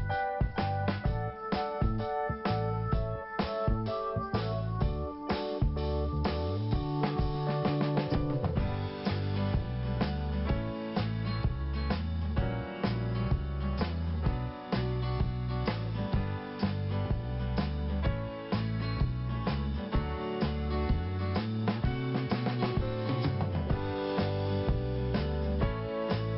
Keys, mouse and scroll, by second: 0.0 click, 3.6-4.0 scroll down 1, 6.4 click, 8.2 scroll up 1, 13.0 click, 17.2 scroll up 1, 18.2 click, 19.9 click, 21.2 click, 22.7 click, 25.4 scroll down 1, 25.9 scroll up 1.